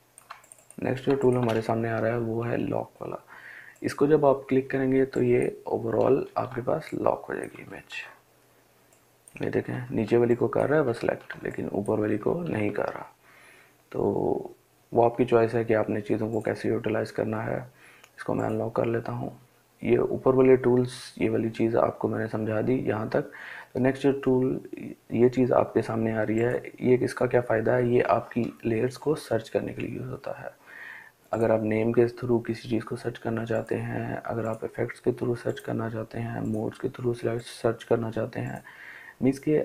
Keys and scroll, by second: 0.4 ctrl+space, 5.6 ctrl+z, 7.0 ctrl+z.